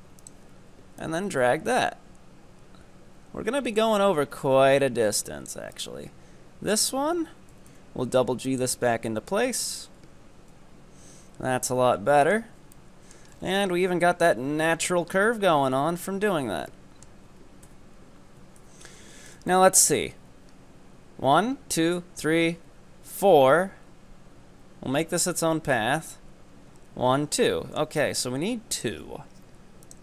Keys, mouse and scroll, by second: 5.7 right click, 7.5 g, 8.8 g, 10.1 Tab, 10.7-11.7 scroll down 2, 11.7-12.5 middle drag, 12.5 z, 12.7-13.4 middle drag, 13.4 scroll up 4, 13.7-14.5 middle drag, 14.5 Tab, 14.7-15.2 scroll down 5, 15.2-17.7 middle drag, 17.7 KP_3, 18.6 KP_7, 19.1 Tab, 19.5 shift+middle click, 19.8-22.5 shift+middle drag, 27.5 shift+middle click, 28.0-28.7 scroll up 2, 28.7-30.0 drag.